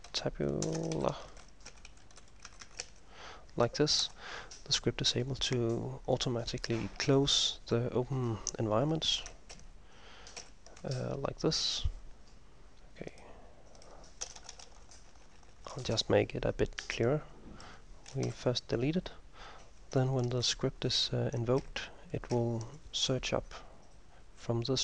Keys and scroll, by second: 0.0-4.1 typing, 6.3-7.1 typing, 9.7 ctrl+m, 10.5 ctrl+m, 14.4 Return, 14.5 Return, 14.7 Return, 14.9 Return, 15.1 Return, 15.3 Return, 15.5 Return, 15.7 Return, 15.8 Return, 16.0-19.3 Return, 18.3 Delete, 21.7 ctrl+m, 22.4 ctrl+m.